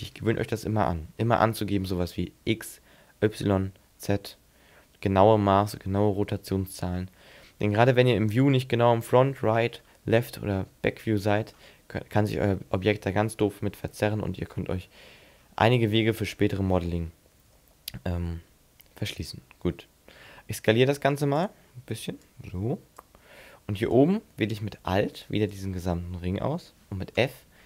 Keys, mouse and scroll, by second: 9.1 scroll up 5, 9.5-9.9 scroll down 8, 10.7 middle click, 14.3-14.7 scroll up 6, 14.7-15.5 scroll down 7, 15.5 scroll up 3, 17.6 l, 19.0 middle click, 20.2 s, 21.4 click, 22.3 click, 23.8 right click, 25.3 alt+right click, 27.2 f.